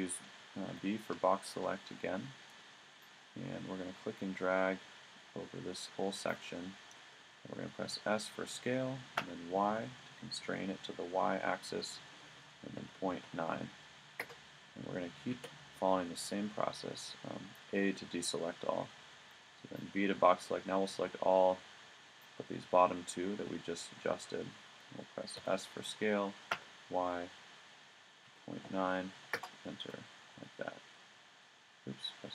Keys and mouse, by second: 0.7 b, 7.8 s, 15.3 a, 19.2 b, 25.4 s, 29.8 a, 30.4 v.